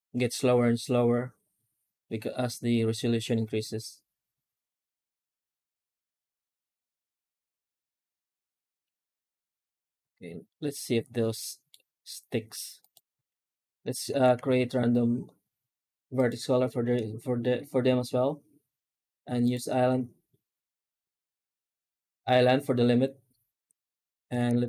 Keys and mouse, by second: 10.3-11.5 middle drag, 13.1 alt+shift+z, 14.1 alt+shift+z, 14.2 shift+q, 24.4 ctrl+space.